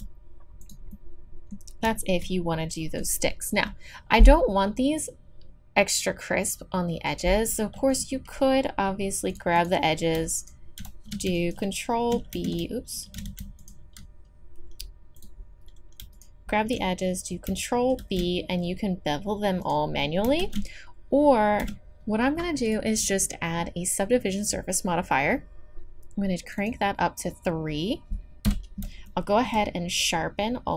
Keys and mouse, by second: 0.9 middle click, 1.3 middle click, 1.7 middle click, 2.1-5.8 drag, 7.9-9.3 drag, 11.4-13.2 drag, 13.2 middle click, 13.6-15.4 super+drag, 16.1-18.0 super+drag, 18.0 ctrl+b, 20.4 ctrl+z, 21.6 a, 22.6-24.8 drag, 26.5-29.1 drag, 28.4 KP_3.